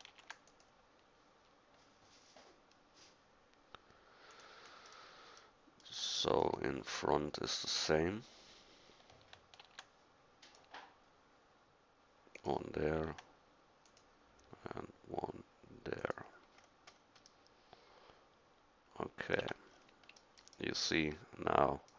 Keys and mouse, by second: 0.1 ctrl+r, 5.6 middle click, 6.8-8.1 middle drag, 9.6 ctrl+r, 13.0 ctrl+r, 17.8 middle click, 19.4 Tab, 20.6 drag.